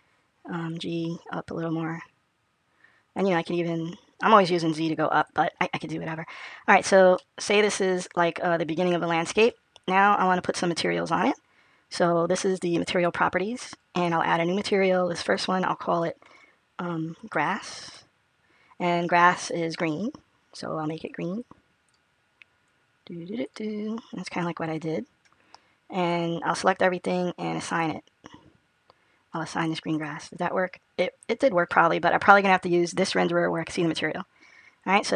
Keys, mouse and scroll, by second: 0.6 g, 7.0 middle click, 12.7 click, 14.6 click, 16.8 click, 18.6 s, 26.5 a, 28.8 click, 30.1 click, 33.7 click.